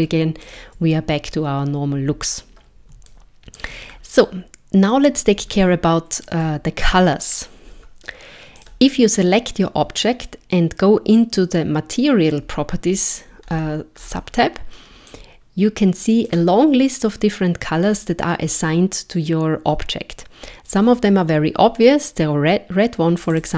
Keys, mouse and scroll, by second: 0.4 click, 3.1 shift+middle click, 3.9 scroll down 1, 5.5 shift+middle click, 6.8 scroll up 1, 8.6 click, 13.4-14.7 scroll up 10, 15.1 click, 23.2 click, 23.4 click.